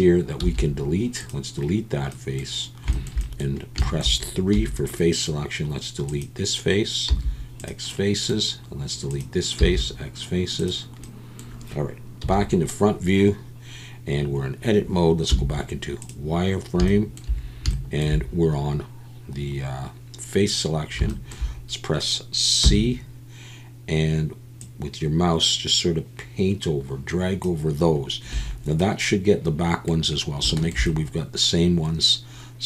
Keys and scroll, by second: 4.5 3, 7.1 x, 9.6 x, 12.2 KP_1, 15.3 z, 22.6 c, 28.3 Escape.